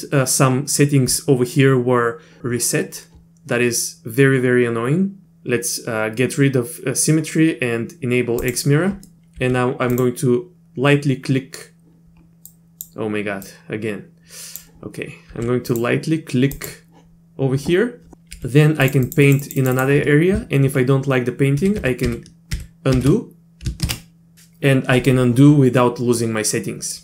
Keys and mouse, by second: 8.4 click, 9.1 middle click, 9.4 f, 12.5 click, 13.4-14.6 drag, 15.3 f, 16.5 click, 18.3 f, 19.0 click, 19.2 click, 19.4 click, 19.6 click, 19.7 click, 21.8 ctrl+z, 22.1 ctrl+z, 22.5 ctrl+z, 23.0 ctrl+z, 23.9 ctrl+z.